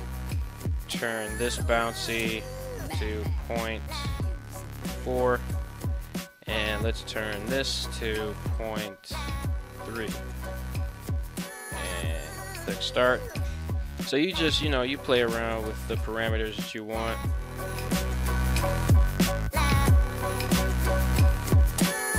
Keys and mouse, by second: 0.9-5.7 drag, 7.4-10.4 drag, 12.5 click, 13.6 right click, 14.4 r, 19.2 right click, 19.5 middle click, 19.9 r, 20.1 r.